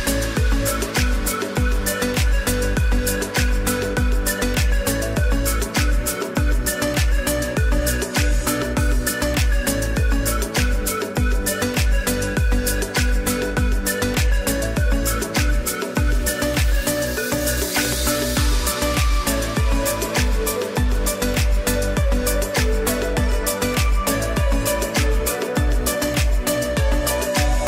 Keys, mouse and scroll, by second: 2.5 e, 4.0 click, 4.7 End, 8.9 click, 11.3 z, 11.8 click, 12.4 space, 12.7 click, 16.3 ctrl+shift+a, 22.1 click, 22.3 space, 22.6 click, 23.1 space, 25.0 click.